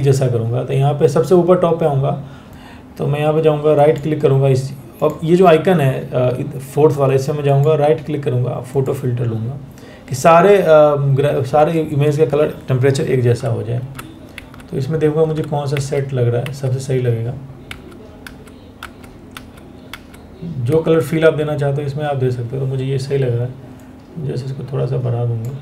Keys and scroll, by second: 12.9 Down, 13.4 Down, 14.8 Down, 15.3 Down, 17.3 Down, 17.9 Down, 19.0 Down, 19.5 Down.